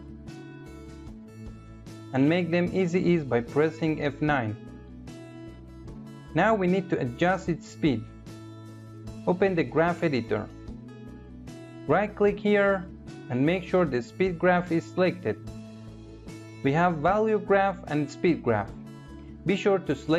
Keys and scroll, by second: 3.1 F9.